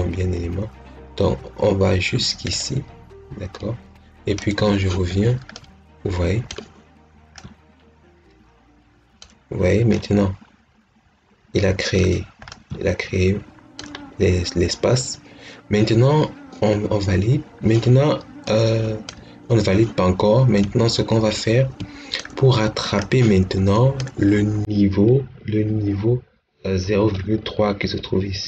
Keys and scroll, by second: 5.5 Caps_Lock.